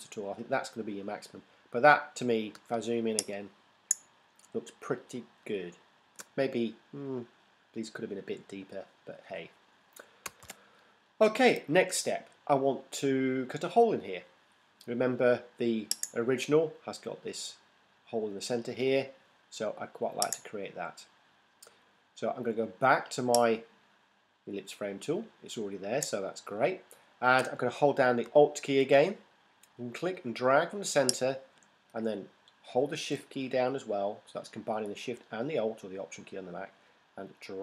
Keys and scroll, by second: 2.7 super+space, 10.4 super+0.